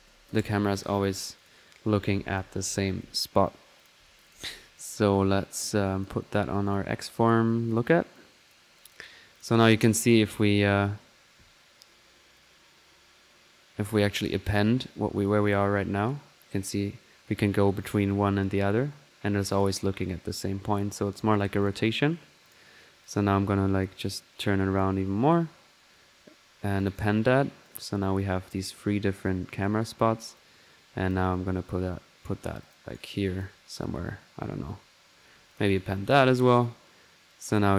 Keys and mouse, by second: 1.4 click, 3.0-4.0 typing, 3.8-6.2 drag, 6.6 click, 7.2 click, 7.5-7.9 typing, 8.1 click, 9.1-9.5 typing, 9.3 click, 9.6 click, 10.2 click, 12.3-13.9 drag, 14.5-20.9 drag, 14.5 typing, 21.6 drag, 22.4 click, 23.0-25.3 drag, 26.8-29.7 drag, 28.1 typing, 30.3-31.9 drag, 31.9 right click, 32.6 click, 32.9 right click, 33.2-34.2 drag, 35.5 drag, 36.1-37.7 drag.